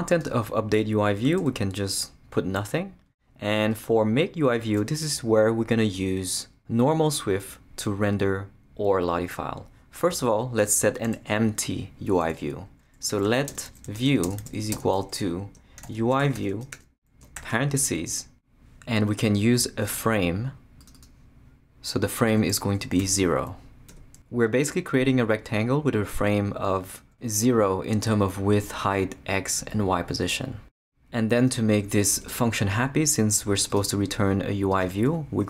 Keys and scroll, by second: 1.4 BackSpace, 10.1 BackSpace, 12.8-17.8 typing, 23.3 z, 23.9 Return, 32.1 Return.